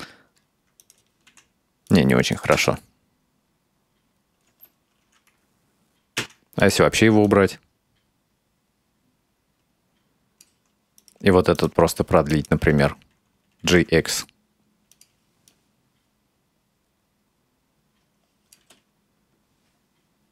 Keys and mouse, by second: 0.9 right click, 1.4 r, 2.4 click, 2.6 space, 4.6 space, 6.2 x, 7.3-10.5 drag, 11.0 right click, 11.6 right click, 12.3 right click, 13.7 g, 15.5-18.6 drag, 18.6 space.